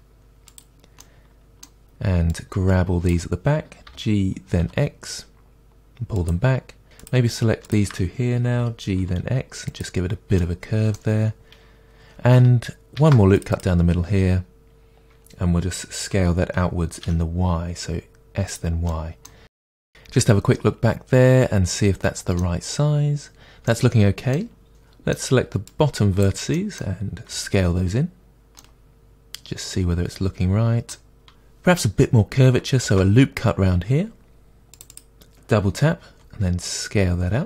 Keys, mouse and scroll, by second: 0.6 click, 1.0-2.3 middle drag, 2.3 click, 3.8 g, 6.3 click, 7.0-8.5 drag, 8.5 g, 9.8 click, 10.4-13.6 middle drag, 13.0 ctrl+r, 13.6 click, 16.1 s, 18.9-24.7 middle drag, 19.5 scroll down 2, 22.7-23.2 scroll up 2, 23.2-23.7 scroll up 1, 25.6 click, 26.5 middle click, 27.3 s, 28.5 click, 28.6-31.3 middle drag, 31.5 middle click, 32.8 ctrl+r, 35.0 click, 36.0 s.